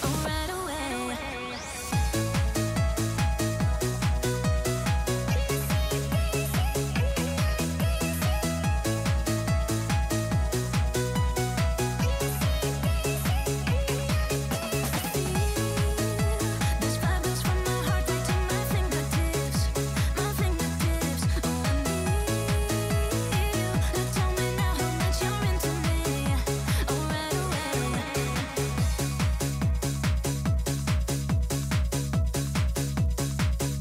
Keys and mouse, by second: 0.3 middle click, 1.0 g, 1.4 y, 1.5 y, 1.6 y, 2.0 click, 2.9 middle click, 3.2 s, 3.9-4.7 middle drag, 5.2-6.2 typing, 9.8-10.9 drag, 14.0 click, 14.3 z, 15.3 click, 15.5 middle click, 16.0 g, 16.4 y, 16.5 y, 16.7 r, 18.0 click, 18.5-21.1 typing, 22.3 x, 22.3 x, 22.5 x, 22.8-23.9 drag, 24.4 click, 26.0 click, 27.3 g, 28.2 y, 28.3 y, 29.8 r, 31.1-32.4 drag, 32.4 z.